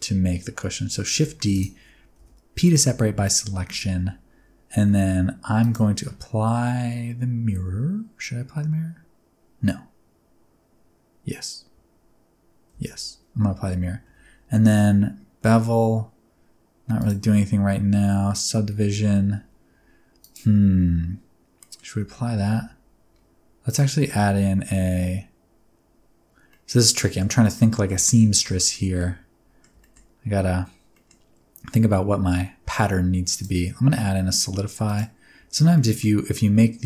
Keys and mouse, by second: 1.1 shift+d, 1.5 click, 2.2 p, 2.9 Tab, 3.7 alt+z, 4.7 alt+z, 5.6 click, 12.7 ctrl+a, 13.5 Tab, 14.1 Tab, 17.0 click, 18.6 alt+z, 19.0 alt+z, 20.2 click, 21.6 middle click, 22.0 Tab, 22.6 Tab, 23.7-26.3 drag, 26.5 middle click, 27.1 middle click, 27.4 shift+middle click, 27.7 middle click, 28.1 shift+middle click, 28.6 shift+middle click, 29.0 middle click, 29.8 shift+middle click, 30.9 middle click, 33.4-35.0 drag, 35.7 middle click.